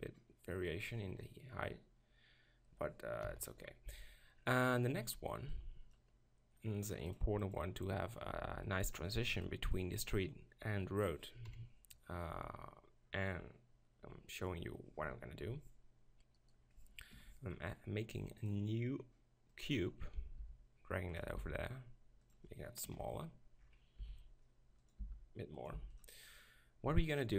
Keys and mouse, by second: 2.1-2.6 middle drag, 3.2 KP_7, 3.8 z, 7.5-8.9 drag, 8.9-11.5 middle drag, 11.5 KP_7, 16.4 right click, 17.1 ctrl+KP_Decimal, 20.4 g, 21.3-23.9 drag, 21.4 s, 22.9 ctrl+KP_Decimal, 24.0 s, 25.0 g, 25.7 s.